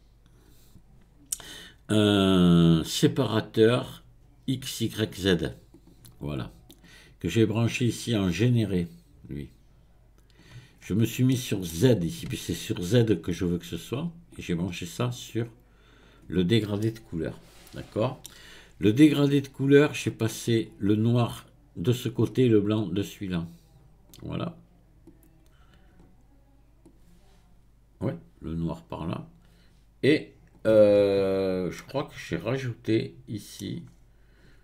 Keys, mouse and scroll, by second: 8.5 click, 10.8-11.3 scroll up 1, 11.3-14.3 middle drag, 14.3 click, 16.8-19.8 middle drag, 20.1-25.2 drag, 26.9-29.9 drag.